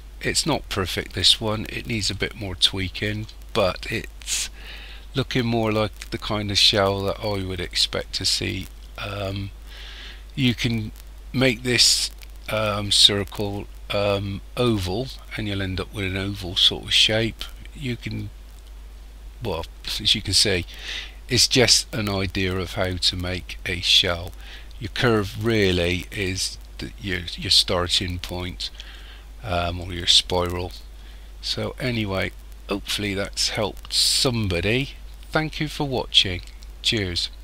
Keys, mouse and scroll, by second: 2.1 shift+middle click, 3.6 middle click, 19.8 middle click, 29.8 middle click.